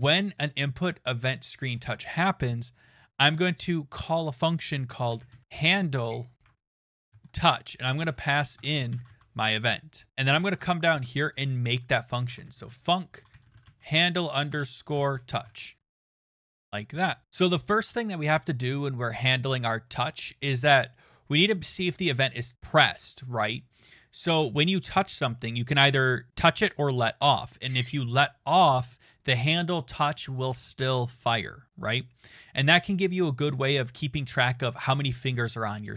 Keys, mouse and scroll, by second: 1.5 click, 4.7-14.1 typing, 10.1 click, 10.1 Return, 10.3 Return, 17.2-18.8 scroll, 19.2 click, 19.2-19.6 scroll.